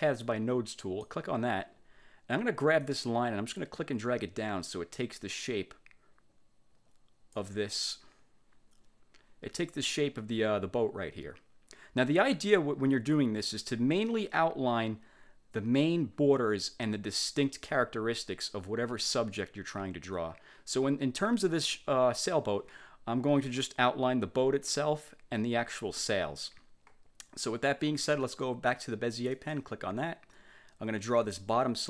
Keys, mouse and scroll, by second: 0.9 click, 2.9-7.7 drag, 29.5 click.